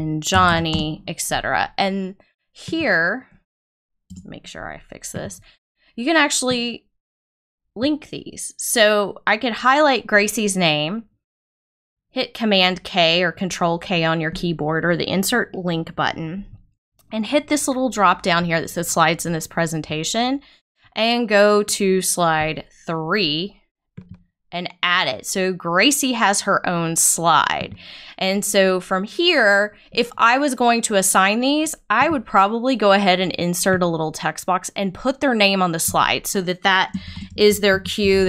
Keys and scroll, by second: 0.0-0.7 typing, 4.0 BackSpace, 37.0 shift+g, 37.7 a.